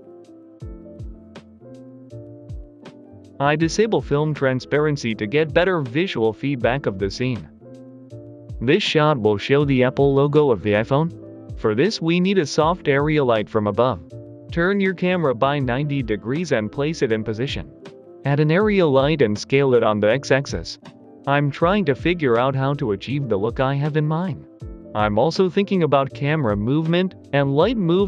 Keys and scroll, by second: 0.0-0.1 typing, 0.3 Return, 2.2-3.0 typing, 8.3 a, 10.7 Escape, 14.9-19.5 typing, 17.2 Return, 21.0-23.7 typing, 23.4 Delete, 25.0-28.0 typing.